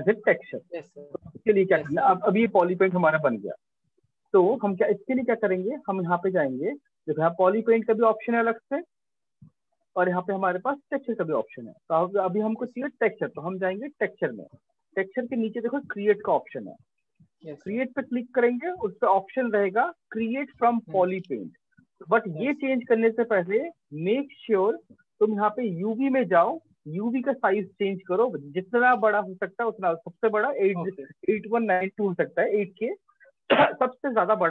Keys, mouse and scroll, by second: 3.4 click, 4.9 click, 7.1 click, 8.7 click, 10.4 click, 16.5-21.6 drag, 25.6 click.